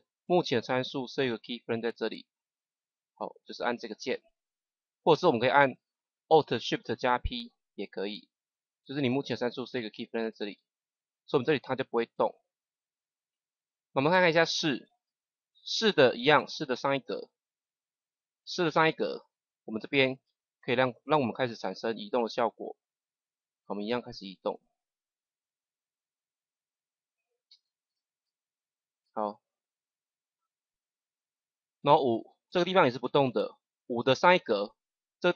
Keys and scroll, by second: 7.1 alt+shift+p, 16.6 Page_Up, 27.4 Right, 34.2 Page_Up.